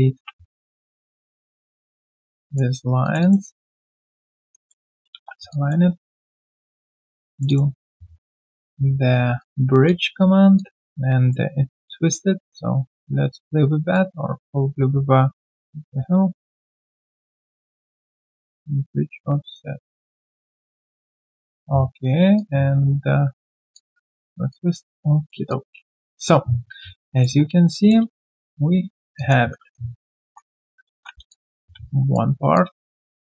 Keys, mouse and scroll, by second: 0.7 Delete, 0.8 alt+click, 2.3 right click, 3.2 double click, 4.7-5.7 typing, 4.7 middle click, 5.5 alt+click, 5.9 right click, 6.8 double click, 7.3 shift+click, 7.4 shift+double click, 9.8 alt+click, 10.5 alt+click, 11.1 alt+right click, 23.7 alt+click, 24.2 alt+right click, 24.5 alt+click, 24.9 q, 25.0 right click, 25.5 alt+click, 26.9 right click, 27.3-28.0 scroll down 1, 28.1 shift+right click, 29.1 alt+click, 29.1 shift+right click, 29.6-30.2 typing, 30.9 ctrl+1, 31.3 alt+click, 31.6 alt+q, 31.8 right click, 32.5 alt+click, 32.9 alt+right click, 33.2 alt+click.